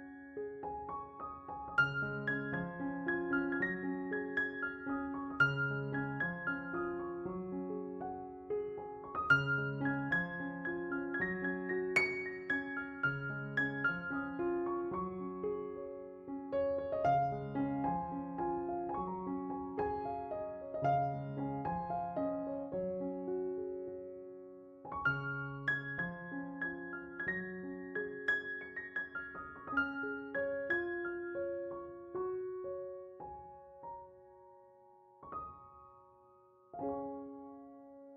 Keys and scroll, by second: 3.0 3, 5.9 s, 13.2 s, 15.5 s, 17.6 s, 25.6 s, 26.0 2, 36.3 s.